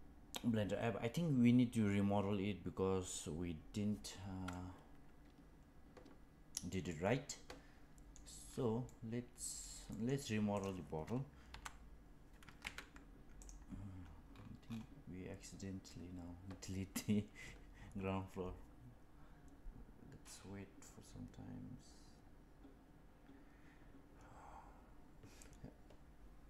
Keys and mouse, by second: 4.4-6.5 middle drag, 6.8-8.1 middle drag, 8.8-9.6 middle drag, 9.8 middle click, 10.4 click, 11.4 Delete.